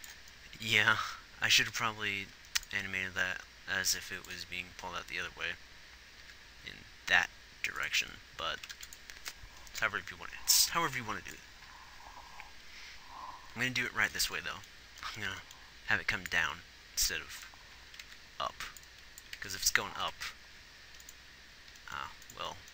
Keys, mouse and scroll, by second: 1.3 g, 9.1 ctrl+s, 18.4 ctrl+z, 19.8 ctrl+z, 20.4 Right.